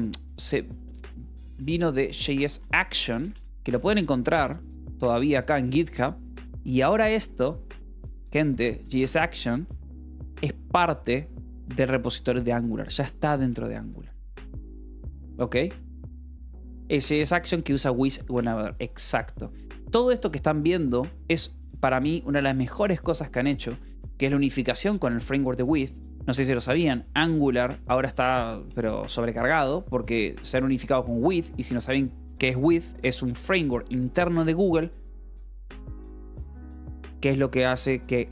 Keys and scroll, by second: 1.7-3.6 typing.